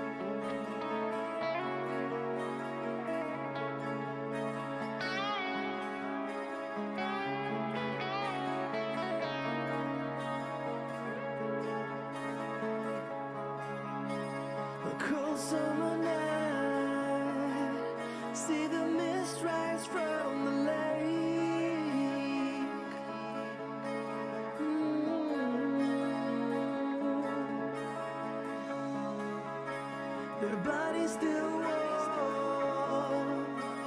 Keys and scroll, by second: 9.6-11.6 typing, 20.1-21.2 typing, 31.8 r.